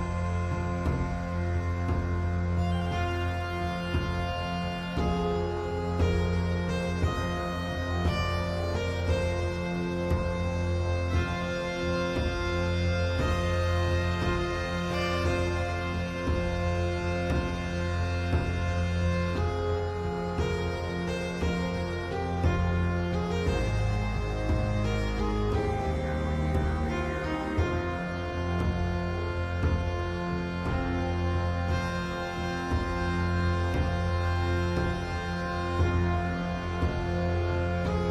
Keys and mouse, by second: 1.0 x, 5.5-6.9 drag, 8.5 click, 9.3 click, 12.1 click, 13.6 click, 14.9 g, 19.8 click, 21.1 g, 24.3 click, 25.9 g, 29.8 z, 33.2 Tab, 36.1 g.